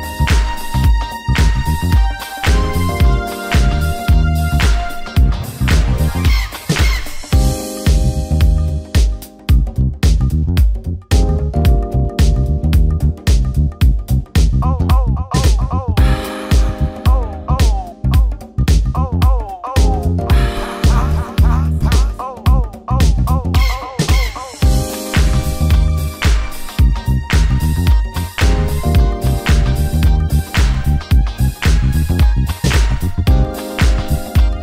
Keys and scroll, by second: 9.6 ctrl+j.